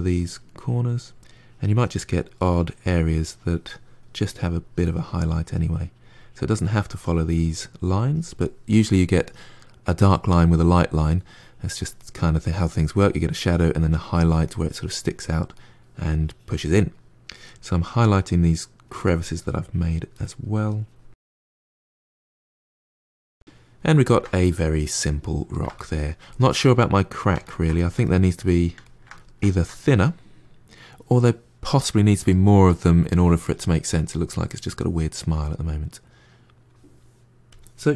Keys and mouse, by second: 0.0 middle click, 0.4 click, 1.3 middle click, 1.9 click, 2.6 middle click, 2.9 click, 3.2 middle click, 3.5 click, 3.8 middle click, 4.1 click, 4.5 middle click, 4.9 click, 5.7 middle click, 6.1 click, 6.5 middle click, 6.8-8.5 drag, 8.5 middle click, 8.8-10.8 drag, 10.8 middle click, 11.1 click, 11.6-12.9 middle drag, 12.9 click, 13.4 middle click, 13.8 click, 14.2 middle click, 14.6 click, 15.0 middle click, 15.8-17.7 drag, 17.7-18.9 middle drag, 18.9 click, 19.3 middle click, 19.6 click, 20.2 middle click, 20.5 click, 21.4 middle click, 21.7 click, 22.5-30.6 middle drag, 32.2-37.4 middle drag, 37.4 click.